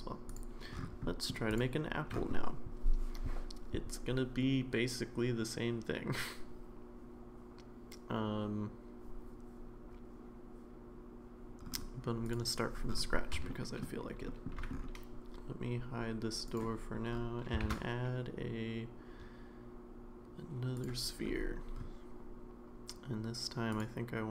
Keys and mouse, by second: 1.1 middle drag, 1.5 click, 13.5 shift+middle click, 14.3 shift+middle drag, 16.5 click, 17.6 shift+a.